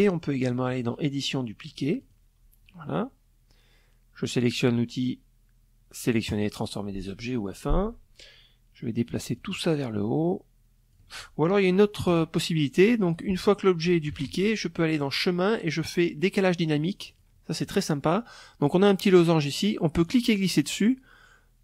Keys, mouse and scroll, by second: 0.5 click, 1.3 click, 4.8 click, 7.9-9.7 shift+drag, 10.5 Delete, 11.6 click, 12.6 ctrl+d, 13.5 click, 15.6 click, 18.6-21.6 drag.